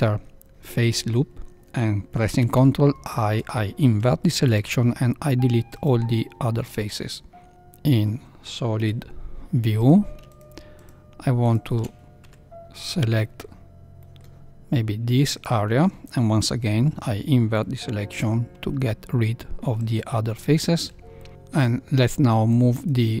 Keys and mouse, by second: 2.5 ctrl+i, 4.4 x, 7.5 middle click, 7.5 z, 8.7 KP_1, 10.3 shift+click, 11.4 shift+click, 12.2 c, 16.4 ctrl+i, 18.1 x, 20.8 Tab, 21.1 middle click, 22.5-23.2 drag.